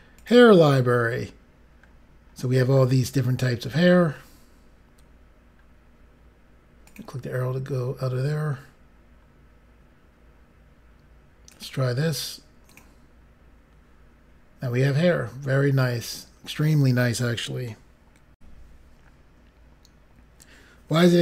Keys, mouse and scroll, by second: 0.2 click, 1.0-1.9 scroll down 5, 5.6 scroll up 4, 6.8 click, 7.6 scroll up 3, 8.4 scroll up 2, 11.5 click, 12.6 click, 18.3 Pause, 19.4 Insert.